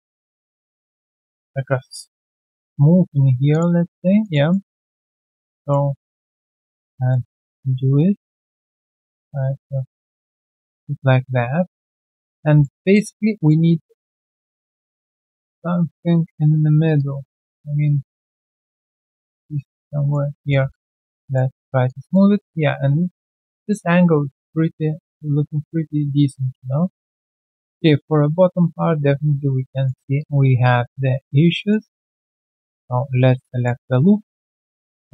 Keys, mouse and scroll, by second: 1.3 right click, 1.9 q, 2.5 right click, 3.8 shift+click, 4.2 alt+shift+click, 4.5 alt+middle click, 5.6 shift+click, 6.4 alt+middle click, 6.6 alt+click, 7.1 alt+middle click, 7.6-8.1 typing, 9.9 alt+click, 10.4 alt+middle click, 10.7 alt+click, 12.2 ctrl+z, 12.2 alt+click, 12.6 ctrl+z, 12.6 alt+middle click, 12.9 alt+click, 16.9 alt+click, 19.5 alt+click, 20.8 3, 20.9 alt+right click, 21.2 alt+click, 21.5 alt+middle click, 21.8 alt+click, 23.6 alt+click, 26.3 alt+click, 27.2 alt+click, 27.5 alt+click, 27.8 alt+right click, 28.5 alt+click, 29.5 right click, 30.6 alt+click, 31.3 right click, 31.8 q, 32.4 double click, 32.9 alt+scroll down 1, 33.4 alt+middle click, 33.4-33.9 alt+scroll down 1, 34.5 ctrl+click.